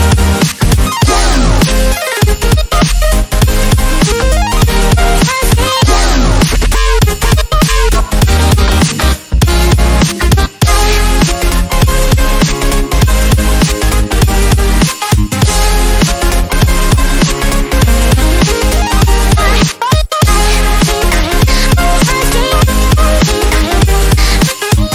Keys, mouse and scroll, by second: 0.5 ctrl+shift+click, 4.8 ctrl+space, 5.0 ctrl+click, 5.1-5.7 ctrl+space, 6.0-6.5 ctrl+drag, 11.0 ctrl+right click, 11.8 ctrl+click, 12.5 ctrl+z, 13.1 right click, 14.2 click, 16.0 right click, 17.3 click.